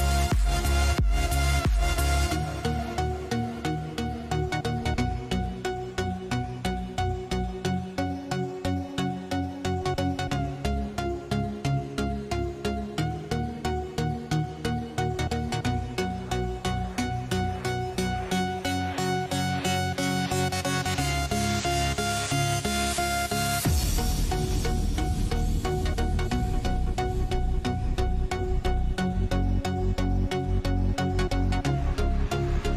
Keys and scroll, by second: 11.6 ctrl+a, 14.6 ctrl+c, 18.0 ctrl+v, 22.0 ctrl+t.